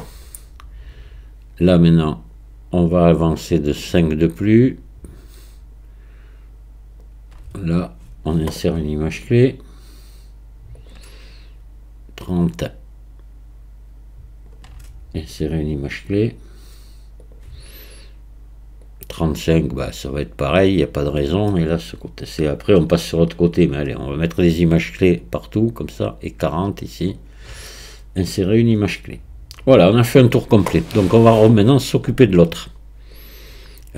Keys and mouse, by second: 1.6 right click, 2.2-7.0 drag, 9.6-12.2 right drag, 12.2 click, 16.2-17.3 drag, 18.8-21.0 drag, 22.4-23.7 drag, 25.2-27.2 drag, 28.5-33.1 right drag, 33.1-33.9 drag.